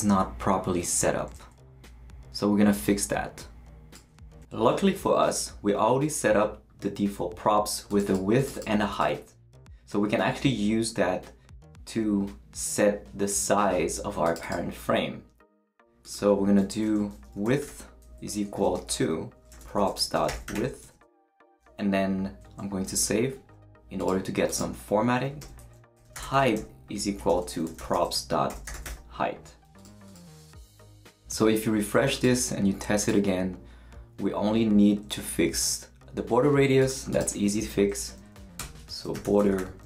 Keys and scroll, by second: 16.7 Left, 16.8-21.0 typing, 22.9 super+s, 25.4 Return, 25.7-29.3 typing, 38.0 Down, 38.2 Right, 38.6 Return, 38.8-39.8 typing.